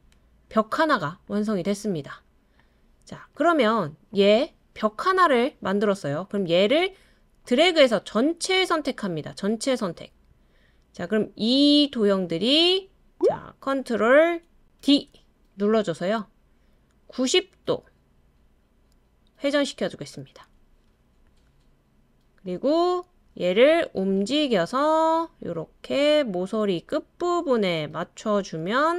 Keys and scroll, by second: 14.8 super+d.